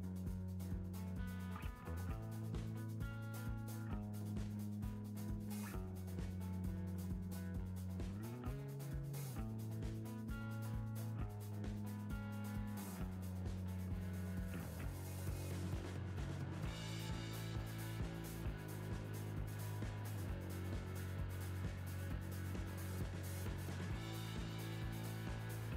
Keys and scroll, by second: 21.6 Return, 22.8 Down, 23.1 Left, 25.2 Right.